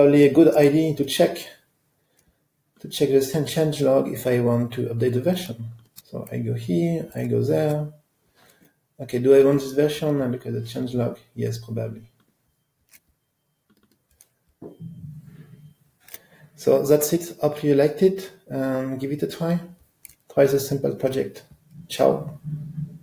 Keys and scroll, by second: 5.9 super+b.